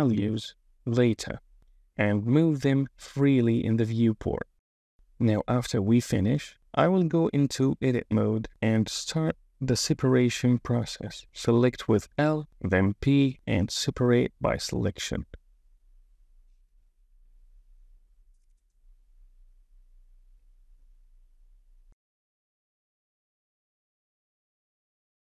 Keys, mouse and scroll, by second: 1.5 shift+middle click, 2.4 super+z, 3.2 shift+middle click, 4.4 shift+middle click, 5.0 KP_1, 5.2 Tab, 6.8 drag, 7.0 KP_1, 7.7 Tab, 10.5 click, 11.5 l, 12.8 p, 18.0 click, 18.9 l, 19.6 l, 20.7 p, 22.0-25.3 typing, 22.7 click.